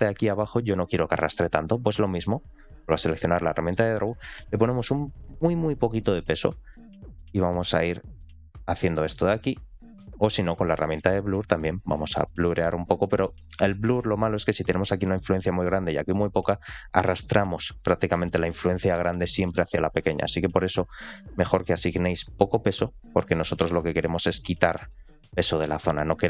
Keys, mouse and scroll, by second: 3.1 click, 4.0-5.5 drag, 5.8 scroll down 1, 6.1 middle click, 7.0 click, 7.9-9.0 drag, 9.7 ctrl+z, 10.6 click, 11.3 click, 12.9 ctrl+z, 13.1 middle click, 13.5 scroll up 2, 13.8 shift+middle click, 14.1-15.7 scroll down 1, 16.6 click, 19.0 ctrl+z, 19.8 click, 21.1-24.4 drag, 24.6 middle click, 25.1-26.2 drag.